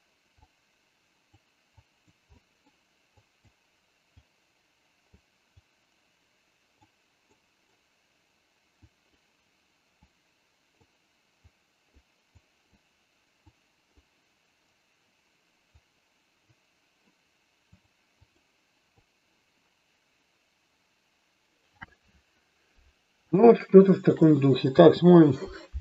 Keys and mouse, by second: 0.4 click, 1.8 click, 2.3 middle click, 3.0 click, 4.2 click, 5.7-6.7 drag, 7.3 middle click, 8.8 click, 9.9 click, 11.4 click, 12.3 click, 13.5 click, 15.7 click, 17.8 click, 23.4 shift+middle click, 24.8 space.